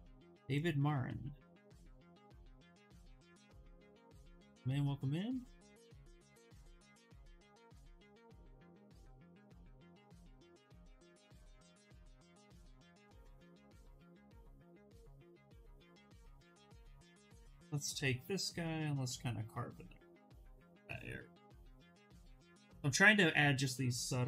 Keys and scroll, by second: 11.7 ctrl+z, 11.8 ctrl+z, 15.8-17.2 typing.